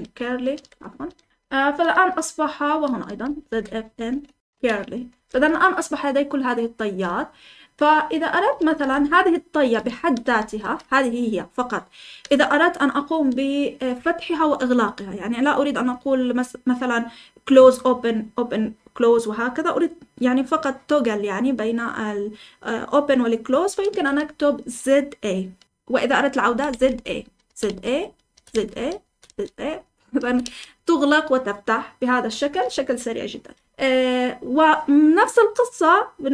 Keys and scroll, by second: 0.0-10.5 typing, 12.2 typing, 25.4-30.9 typing.